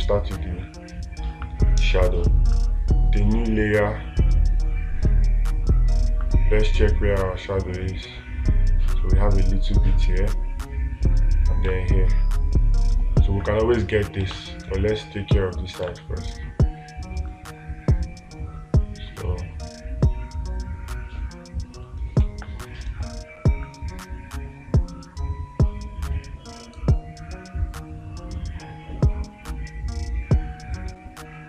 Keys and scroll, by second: 12.1 space, 14.7 space, 22.7 space.